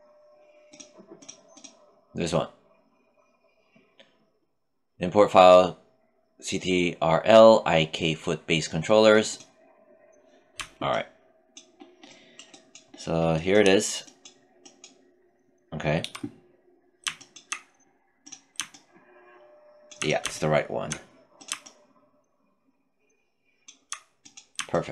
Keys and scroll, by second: 15.4 w.